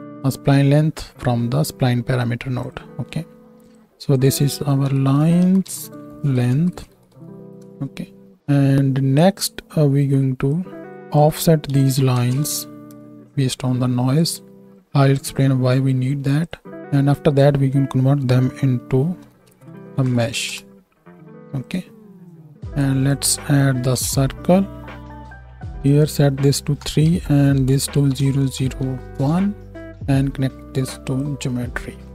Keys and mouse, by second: 2.7 right click, 3.7 right click, 14.3-16.4 right drag, 16.4 middle click, 16.5 right click, 16.7-21.8 middle drag, 21.8-22.8 right drag, 25.3 right click, 28.4 KP_0.